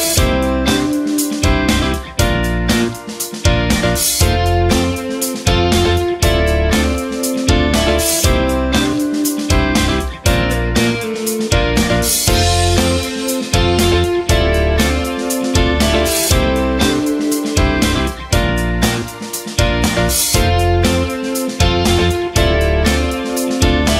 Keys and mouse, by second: 0.1 b, 1.3 s, 4.6 ctrl+r, 6.7 alt+z, 7.2 alt+z, 7.5 b, 9.2 x, 12.1-16.8 drag, 17.0 ctrl+r, 18.6 right click, 18.9 c, 20.2 e, 21.1 g, 22.1 s.